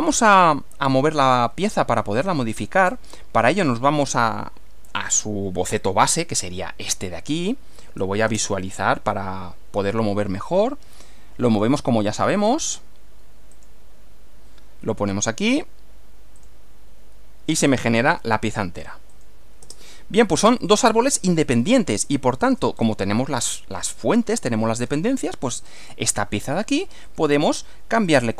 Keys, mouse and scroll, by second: 1.2 middle click, 2.3 middle click, 4.9 click, 6.4 click, 8.3 space, 11.5 click, 13.6 click, 16.4 click, 17.7-18.2 scroll down 2, 19.1 click, 19.6 space, 20.7 click, 21.5-22.7 shift+middle drag, 22.7 shift+scroll up 2, 23.0 shift+middle click, 23.3 scroll up 2, 23.7-25.1 middle drag, 25.7 click, 27.1 click, 28.1 click.